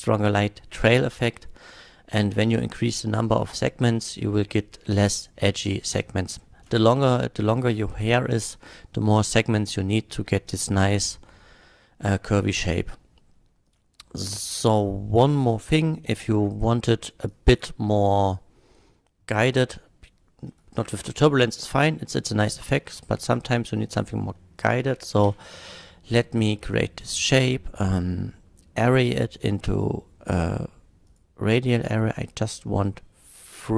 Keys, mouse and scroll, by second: 6.4 middle click, 13.7 click, 15.4 click, 16.1-16.5 middle drag, 17.2 click, 18.0 drag, 20.5 click, 21.2 x, 22.3 click, 23.0 shift+a, 23.9 click, 24.4-24.9 middle drag, 25.2 q, 31.1 click, 31.8 middle click, 31.8 scroll down 1.